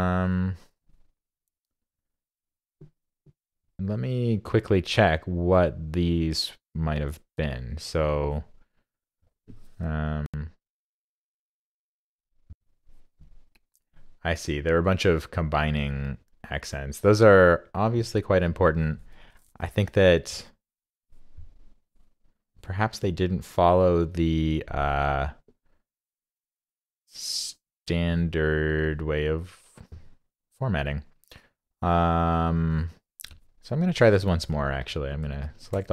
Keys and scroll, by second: 35.5 super+a.